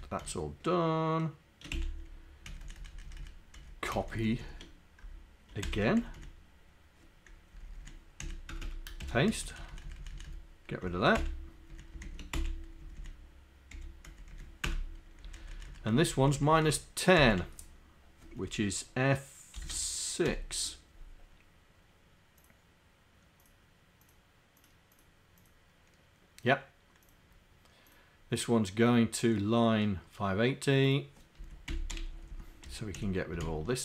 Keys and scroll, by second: 5.7 ctrl+Insert, 6.1 Down, 7.5 Down, 8.2 Up, 8.4 Down, 8.7 Return, 9.9 Up, 10.2 Up, 11.0 shift+Down, 11.7 Down, 12.4 Delete, 12.8 Down, 13.0 Down, 13.7 End, 14.1 Down, 14.4 Down, 14.7 Return, 15.3 Up, 15.9 Right, 16.4 Right, 17.2 Delete, 19.6 shift+f.